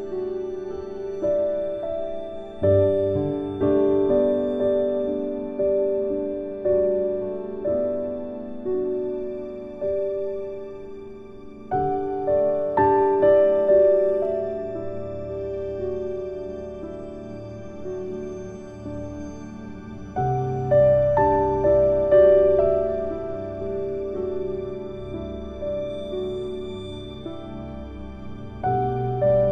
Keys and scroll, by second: 2.3 ctrl+a, 15.7 ctrl+q.